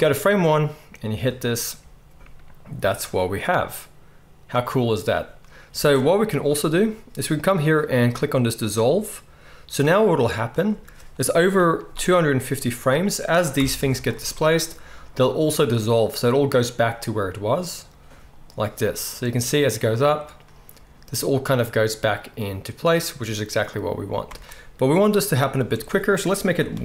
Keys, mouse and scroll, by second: 5.7 space, 8.1-8.8 middle drag, 13.6 shift+Left, 14.2 space, 23.1-24.2 middle drag, 24.2 space.